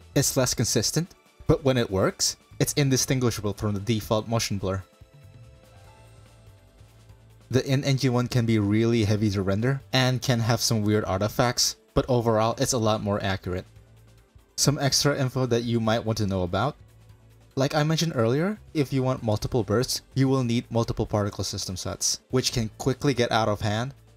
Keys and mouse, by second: 1.3 click, 8.4 click, 23.2-24.1 drag.